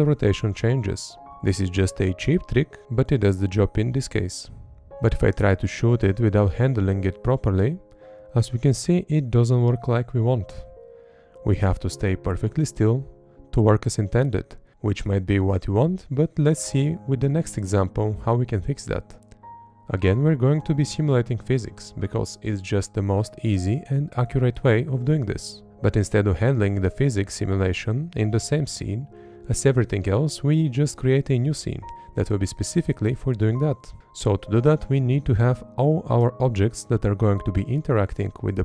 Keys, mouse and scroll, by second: 4.9 Up, 4.9 Right, 5.0 Left, 5.2 Up, 5.6 Up, 5.9 Right, 6.0 Up, 6.4 Up, 6.7 Left, 6.9 Up, 7.5 Right, 7.7 Up, 8.3 Left, 8.5 Up, 9.5 Right, 10.2 Up, 10.6 Left, 11.0 Up, 11.6 Left, 11.9 Up, 12.4 Right, 12.8 Up, 13.1 Left, 13.7 Right, 14.1 Up, 32.2 Left, 33.8 Up, 34.9 Up, 36.0 Up, 37.1 Up, 37.8 Left.